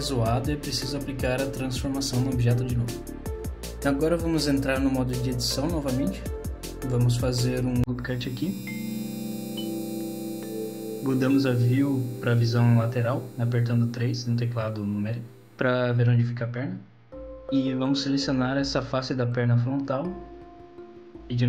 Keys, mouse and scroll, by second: 2.3 middle click, 3.1 Tab, 3.8 middle click, 4.7 scroll up 1, 5.7 middle click, 6.2 middle click, 6.6-7.3 scroll down 1, 7.3 middle click, 8.4 ctrl+r, 11.3 middle click, 13.2 KP_3, 15.9 3, 18.6 middle click, 18.6-19.0 scroll up 1, 20.2 click, 20.9 middle click.